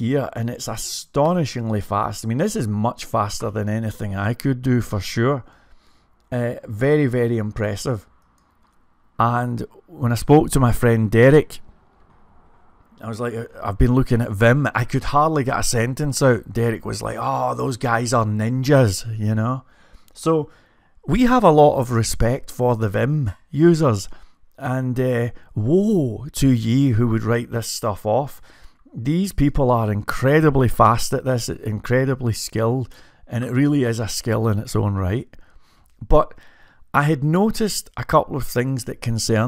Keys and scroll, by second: 0.7-1.4 typing, 2.5-7.1 typing, 7.7 ctrl+g, 8.3-20.1 typing, 21.4-26.9 typing, 28.1-29.8 typing, 31.1-33.5 typing, 35.1-35.8 typing.